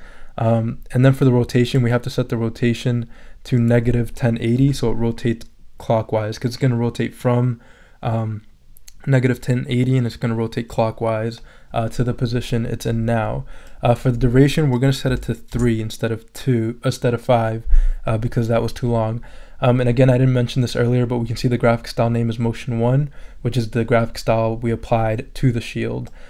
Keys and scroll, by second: 4.6 -, 15.1 3, 15.5 Return.